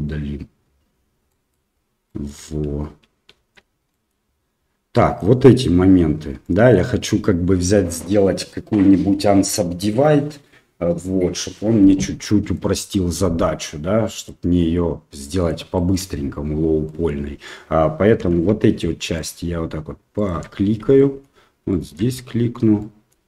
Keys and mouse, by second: 1.3 middle click, 2.0 middle click, 3.5 shift+z, 3.9 middle click, 4.9 middle click, 6.4 middle click, 12.5 middle click, 14.2-15.4 middle drag, 15.7 shift+middle click, 16.8 middle click, 18.2 2, 20.2 alt+shift+right click, 20.9 shift+middle click, 21.7 shift+middle click, 22.7 middle click.